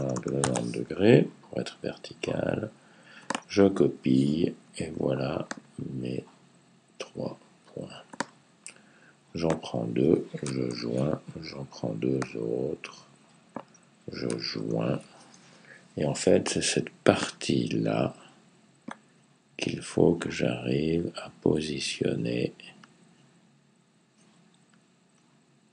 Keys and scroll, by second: 0.0-0.4 typing, 10.5 super+j, 14.4 super+j.